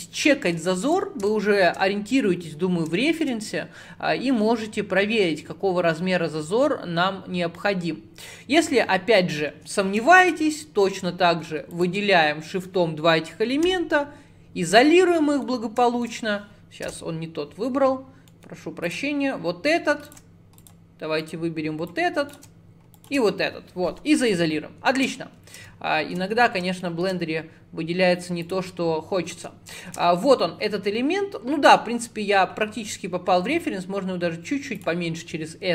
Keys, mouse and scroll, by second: 0.3-0.7 scroll down 1, 0.7 shift+middle click, 1.1 scroll up 5, 1.3 shift+middle click, 2.0-3.0 scroll up 7, 3.0-6.1 shift+middle drag, 8.8-9.6 scroll down 10, 9.6 Tab, 10.3 shift+click, 11.0-11.8 scroll down 2, 11.8 shift+click, 13.7 /, 14.9 scroll up 5, 15.2 middle click, 15.5 scroll down 1, 15.9-16.9 shift+middle drag, 16.9 /, 18.1 scroll down 2, 18.3 middle click, 18.9 click, 19.7 scroll up 1, 20.1 shift+click, 20.6 click, 21.3 click, 21.9 click, 23.0 shift+click, 24.0 /, 24.3-26.4 middle drag, 26.4-26.9 scroll up 8, 26.9 shift+middle click, 27.4 scroll up 2, 28.5 click, 29.2 scroll up 2, 29.4 Tab, 29.8 shift+middle click, 30.2-30.5 scroll up 3, 31.2 scroll up 5, 33.5 s.